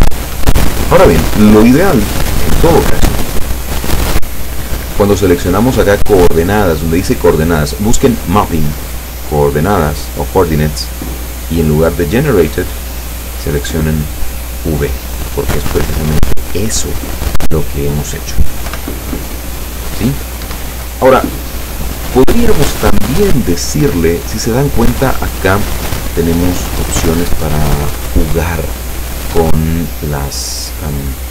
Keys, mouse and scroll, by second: 0.4 Escape, 2.1-3.8 scroll down 4, 12.6 click, 14.3 click, 18.7 p, 20.5 Escape, 21.2-22.0 scroll down 4, 26.9 click.